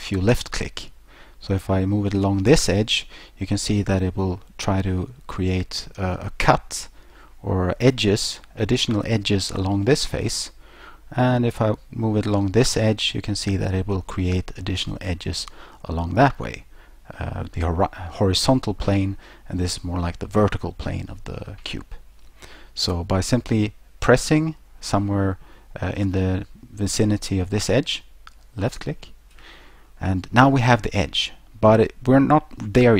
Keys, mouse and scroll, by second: 28.7 click.